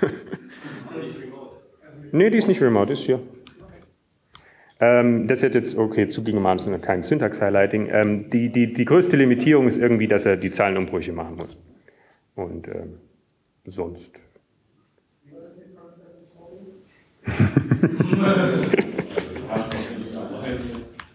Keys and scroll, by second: 2.4 typing, 7.3-8.0 typing, 9.7 ctrl+Down, 19.5 ctrl+Down, 20.0 ctrl+Down, 20.8 ctrl+Down.